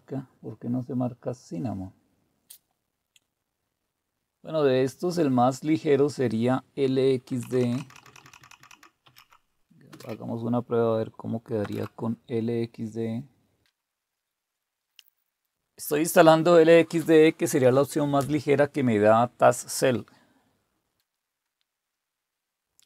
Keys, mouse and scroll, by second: 7.3-9.9 typing, 11.6 typing.